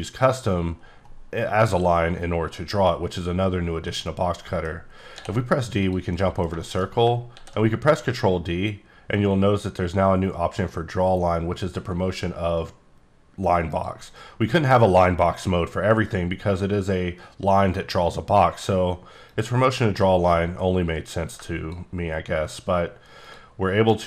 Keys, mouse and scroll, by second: 3.8 middle click, 5.1 d, 5.7 click, 6.1 middle click, 6.4 scroll down 1, 6.6 shift+scroll, 6.6 shift+middle click, 7.3 ctrl+d, 13.7 click, 19.3-21.8 drag.